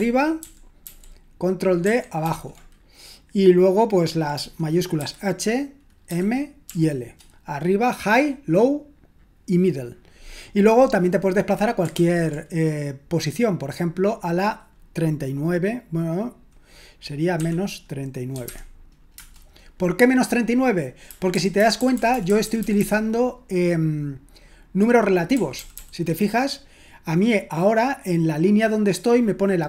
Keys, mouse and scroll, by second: 0.0 ctrl+u, 0.4 ctrl+u, 0.9 ctrl+u, 1.9 ctrl+d, 2.2 ctrl+d, 5.0 typing, 6.1-6.6 typing, 18.1-19.1 typing, 21.3-22.8 typing, 25.5 typing.